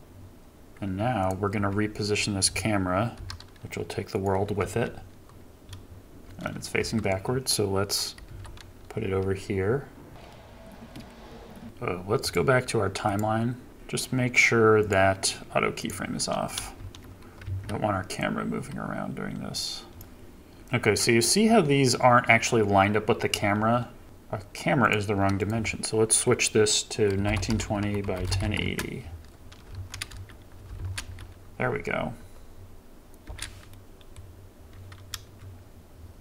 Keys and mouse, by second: 1.6 KP_7, 3.2 g, 4.7 r, 5.6 KP_0, 6.2 KP_0, 6.8 KP_7, 8.3 r, 10.9 g, 11.6 ctrl+z, 11.6 Delete, 12.3 click, 16.8 shift+Left, 17.6 Right, 18.2-20.0 drag, 20.6 shift+Left, 24.0-24.9 middle drag, 25.1 middle click, 28.4 KP_0, 28.8 middle click, 29.4 middle click, 29.7 shift+Left, 30.1 space, 30.8 shift+Left, 30.8 space, 31.0 space, 33.2 space, 33.7 middle drag, 34.2 middle click, 35.3 KP_0.